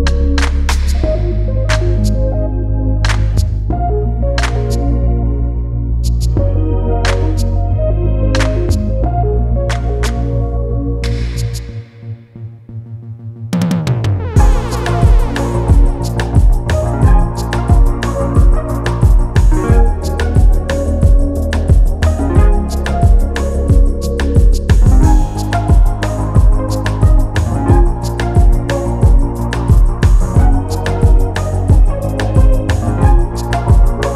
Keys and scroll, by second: 0.5 space, 7.6 space, 10.1 space, 17.7 ctrl+c, 22.8 ctrl+z, 24.2 ctrl+z, 30.4 space, 33.6 space.